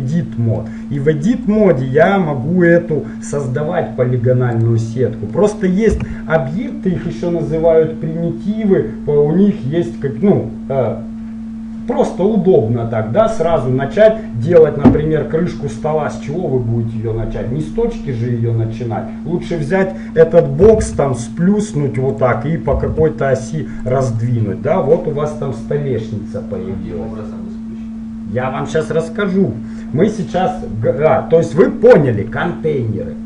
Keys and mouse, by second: 0.1 click, 0.6-1.6 middle drag, 1.6 click, 2.4-3.4 right drag, 3.4-4.7 middle drag, 5.5-7.3 middle drag, 6.1 Tab, 20.8 s, 22.9 s, 24.3 middle click, 32.1-33.2 middle drag.